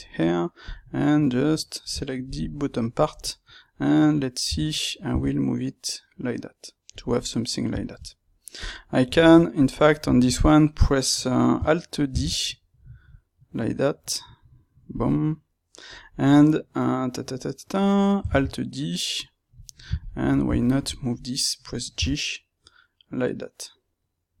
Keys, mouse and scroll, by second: 0.6 click, 0.8-2.2 middle drag, 2.2 shift+click, 2.4-8.5 middle drag, 5.0 g, 8.5 click, 9.0 ctrl+middle click, 9.5 click, 9.9-14.9 ctrl+middle drag, 12.0 alt+d, 14.9 click, 15.8 click, 18.2 alt+d, 19.5 click, 20.3-24.4 ctrl+shift+middle drag, 21.9 g.